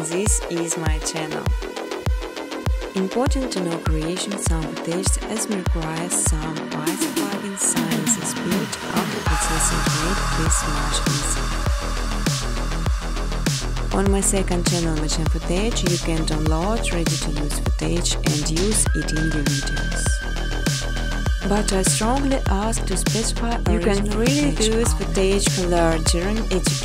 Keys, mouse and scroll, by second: 0.1 click, 0.4 right click, 1.4 click, 2.1-3.0 typing, 4.4 click, 6.4-8.3 typing, 7.5 click, 8.5 click, 9.7 click, 10.3-11.7 typing, 12.2 click, 13.1 click, 14.5 click, 15.5 click, 17.3 6, 17.6 Tab, 18.4 typing, 24.0 Tab, 24.2-24.9 typing.